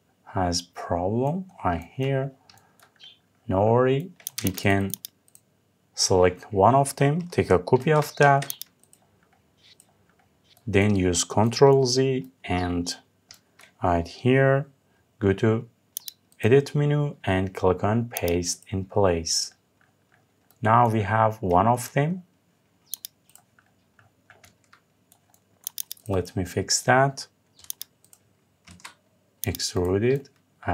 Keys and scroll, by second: 7.4 ctrl+c, 8.0 Escape, 10.2 ctrl+z.